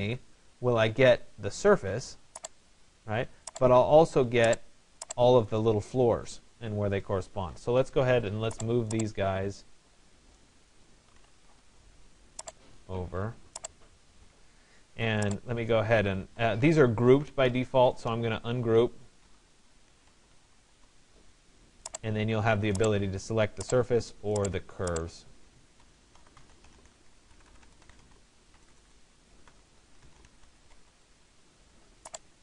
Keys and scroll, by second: 11.0 Return, 18.9 BackSpace, 27.0 BackSpace.